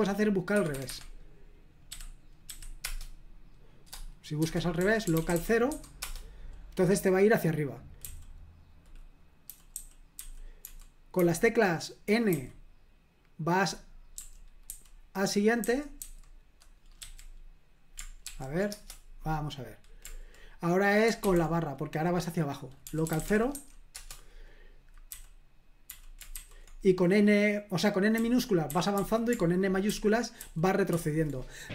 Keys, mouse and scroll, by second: 0.6 Escape, 0.7 Escape, 0.9 Escape, 1.9-2.5 typing, 2.8 Return, 4.2-6.2 typing, 8.0 typing, 9.2-11.2 typing, 12.3 typing, 14.7-17.0 typing, 18.2 ctrl+p, 18.7 Return, 21.2 /, 22.6-24.0 typing, 25.1-26.3 typing, 28.1-30.9 typing.